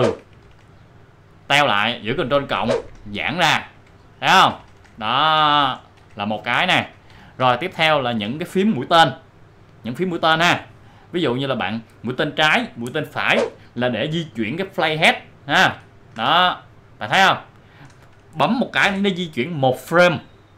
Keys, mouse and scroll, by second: 2.5 ctrl+=, 7.1 ctrl+=, 13.8 Left, 19.4 Left.